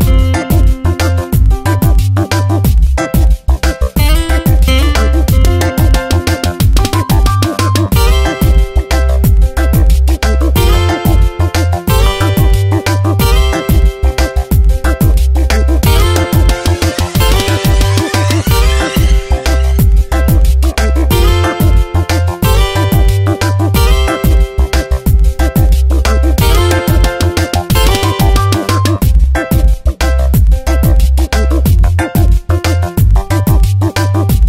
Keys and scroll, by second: 0.2 shift+Down, 4.1 ctrl+shift+i, 7.1 ctrl+z, 10.5 Tab, 10.7 space, 15.4 ctrl+z, 24.9 ctrl+z, 29.0 space.